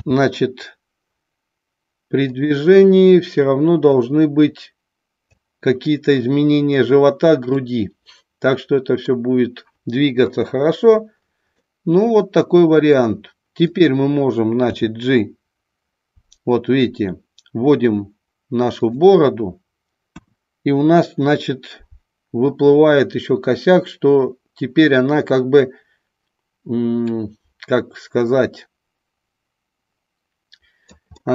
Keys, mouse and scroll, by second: 0.0 r, 2.3 click, 4.0-5.3 drag, 7.6-9.1 middle drag, 10.1 KP_1, 11.6-13.0 middle drag, 13.7 click, 14.7 g, 19.0 click, 20.1 KP_1, 22.5-30.9 drag, 31.2 scroll up 1.